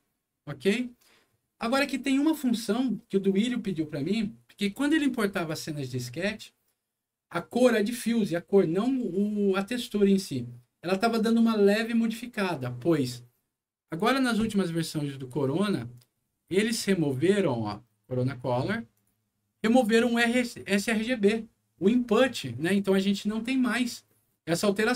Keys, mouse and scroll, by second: 0.4 click, 13.7 scroll down 1, 15.7-16.9 scroll down 4, 17.6 click, 18.9 click.